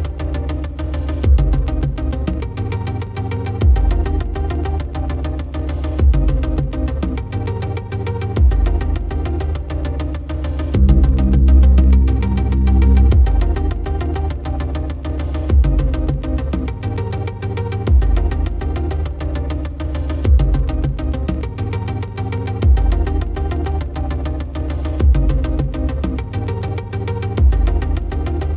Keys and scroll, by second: 14.7 ctrl+alt+z.